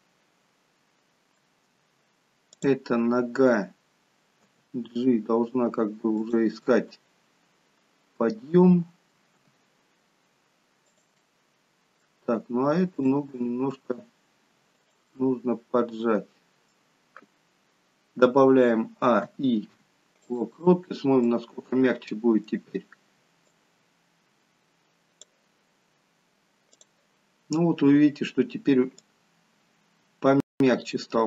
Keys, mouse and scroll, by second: 2.7 click, 4.5 g, 6.8 middle click, 9.5 g, 11.3 middle click, 13.1 click, 13.7 g, 15.2 middle click, 19.1 a, 19.3 i, 20.9-23.6 scroll down 3, 21.3 middle click, 23.7 click, 26.8 click, 27.7-29.2 scroll up 1, 29.2 click, 29.2-29.9 scroll up 1.